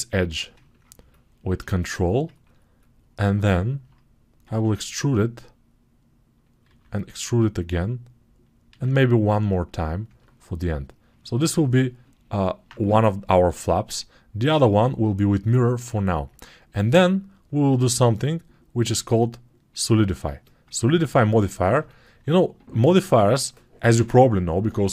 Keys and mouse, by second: 4.3 e, 6.5-10.8 right drag, 6.5 e, 10.8 ctrl+alt+click, 11.1-16.2 alt+right drag, 13.6-16.2 drag, 13.6-16.2 middle drag.